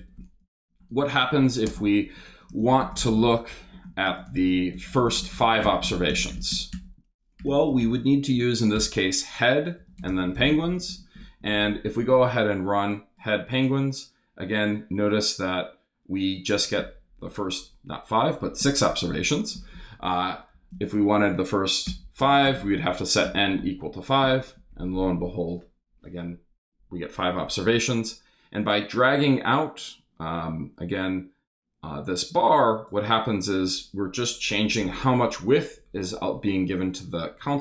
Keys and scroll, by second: 0.2-11.0 typing, 20.0 Left, 20.5-23.0 typing, 23.2 super+Return.